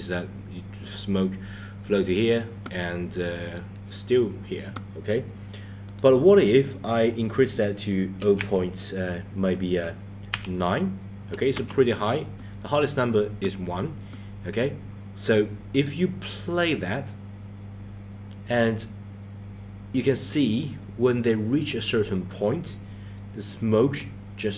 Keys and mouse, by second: 3.4-3.8 drag, 5.9-11.8 drag, 15.7 click.